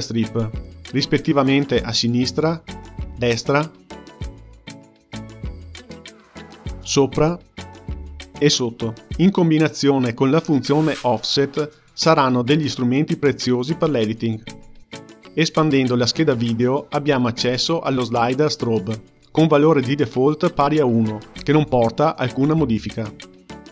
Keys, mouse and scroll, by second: 1.1-11.5 drag, 18.4 click, 19.2-22.7 scroll down 3.